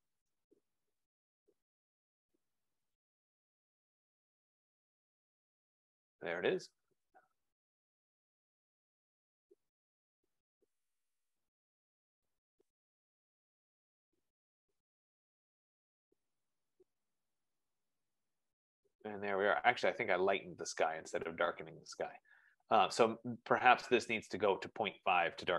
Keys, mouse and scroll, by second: 24.1 click, 25.2 click.